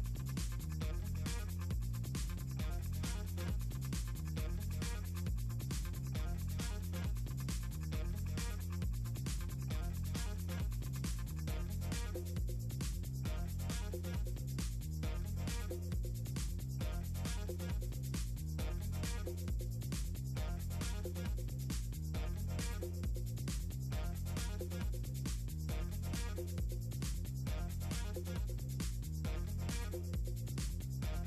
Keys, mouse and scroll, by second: 0.1 scroll up 2, 0.3 click, 0.8 click, 1.2 scroll down 2, 1.9 scroll down 2, 2.6 click, 3.9-4.4 scroll down 4, 4.9 scroll down 2, 6.2 click, 9.5 click, 10.3 click, 11.2 i, 11.7 a, 15.5 scroll down 4, 16.0 click, 16.7 click, 16.9 r, 17.9 click, 19.0-20.5 scroll down 10, 20.8-21.8 typing, 20.8 click, 22.1 click, 22.9 s, 24.4 scroll down 2, 25.1 scroll down 2, 25.9 scroll down 2, 27.1 scroll up 2, 27.4 right click, 28.1 click, 28.3-28.9 scroll down 4, 28.9 scroll up 2, 29.5 right click, 29.6 click, 29.7 scroll down 2, 29.9 click.